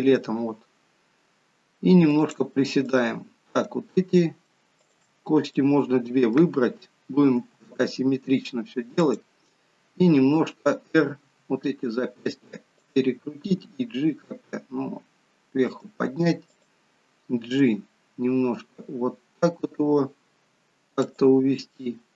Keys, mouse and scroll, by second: 0.1 g, 2.8 click, 4.8 shift+click, 5.5 middle click, 7.3 g, 11.3 r, 13.6 g, 16.5 click, 17.6 g.